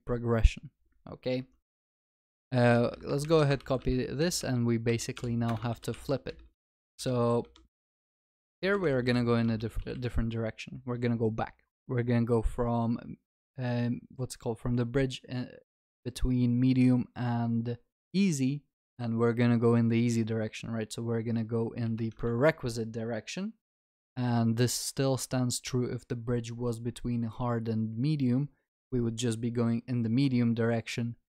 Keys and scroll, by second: 3.6 ctrl+c, 5.7 ctrl+v, 5.9 ctrl+s, 8.6 ctrl+s, 8.6 ctrl+BackSpace, 22.2 Return.